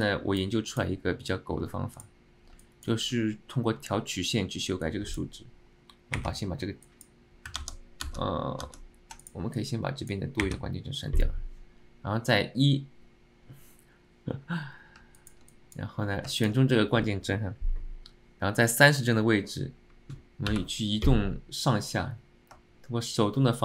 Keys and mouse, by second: 0.8 click.